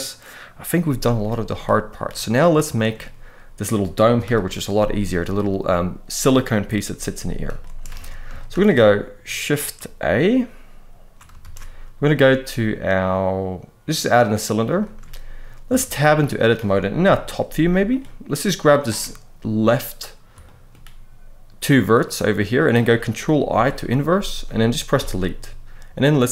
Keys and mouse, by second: 1.3-1.7 middle drag, 2.5 shift+middle drag, 4.0 KP_1, 7.3 shift+middle drag, 7.7 alt+a, 8.2 shift+middle click, 11.2 shift+a, 14.6 shift+middle click, 15.4 Tab, 15.6 middle click, 16.8 KP_7, 17.3 z, 18.3 click, 20.2 shift+middle click, 21.7 middle click, 23.2 ctrl+i, 24.7 Delete.